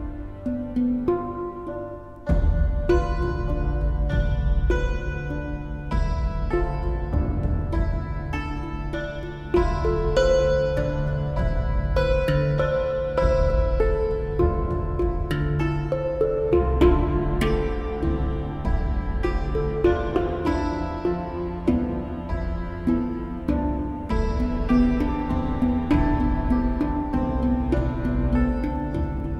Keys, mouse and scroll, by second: 0.5 right click, 1.1 right click, 1.5 right click, 1.9 right click, 4.8 right click, 6.1 right click, 8.7 right click, 9.1 right click, 9.4 right click, 9.8 right click, 10.0 right click, 11.7 right click, 13.4 right click, 14.5 right click, 15.1 right click, 16.0 right click, 16.5 right click, 18.1 right click, 18.3 right click, 18.9 right click, 19.1 right click, 20.0 right click, 20.1 right click, 20.7 right click, 21.1 right click, 21.6 right click, 22.1 right click, 23.0 right click, 23.2 right click, 23.4 right click, 23.8 right click, 24.3 right click, 24.8 right click, 25.9 right click, 26.3 right click, 26.8 right click, 28.1 right click, 28.3 right click, 28.5 right click.